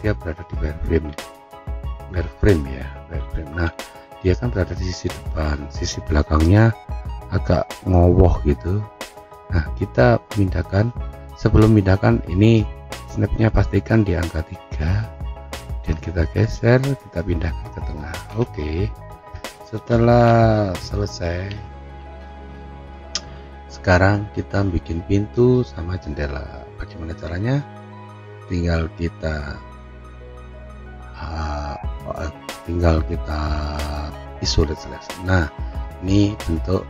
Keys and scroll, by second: 20.2 F3, 21.9 F4.